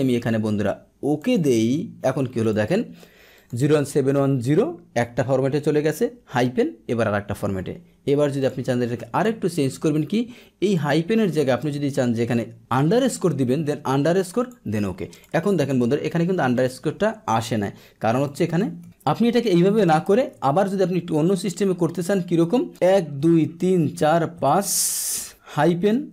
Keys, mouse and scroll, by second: 1.1 click, 2.4 click, 3.3 click, 8.4 click, 8.9 ctrl+1, 10.6 click, 14.3 click, 15.1 click, 16.5 click, 18.2 click, 18.5 ctrl+1, 20.0 ctrl+1, 21.4 click.